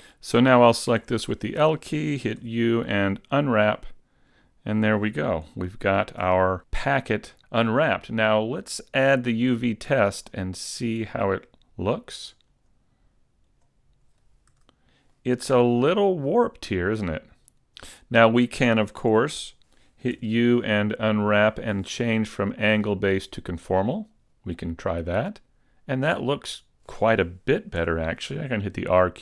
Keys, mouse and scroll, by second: 1.0 l, 2.4 u, 4.3 scroll down 4, 5.6 shift+middle click, 7.8-8.3 scroll up 1, 9.1 click, 12.4 click, 14.5 a, 15.1 middle click, 19.6 super+z, 20.1 u, 22.7 click, 27.8 r.